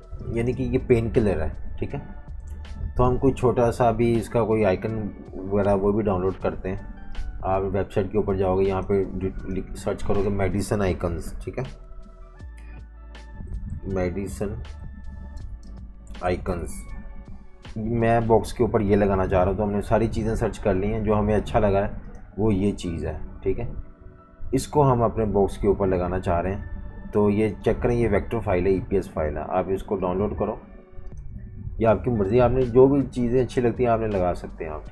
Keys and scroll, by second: 0.0 v, 0.1 space, 2.5 v, 2.6 space, 11.0 BackSpace, 11.1 BackSpace, 11.2 BackSpace, 12.7-16.9 typing.